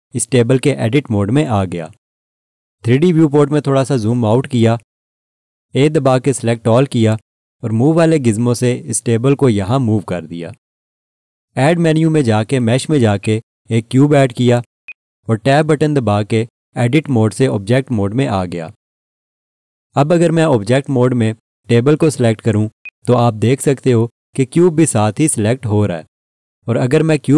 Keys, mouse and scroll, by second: 3.2 scroll down 1, 6.0 a, 8.0 click, 13.2 click, 17.0 Tab, 22.0 click, 27.1 click.